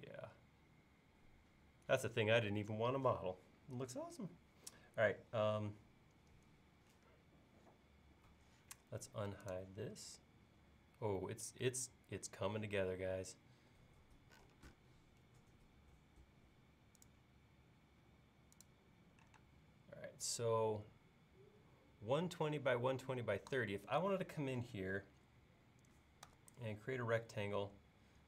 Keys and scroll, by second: 13.2 l, 19.4 space, 26.3 r.